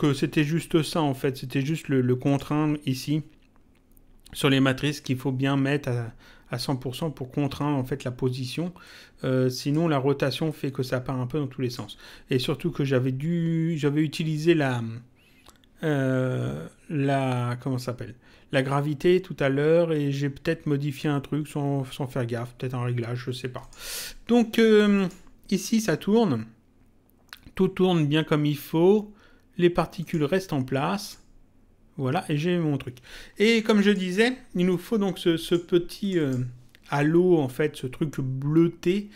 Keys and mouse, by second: 2.2 click, 8.7 click, 10.4 click, 23.5 click, 24.9 click, 29.9 click, 33.7 click, 35.4 click.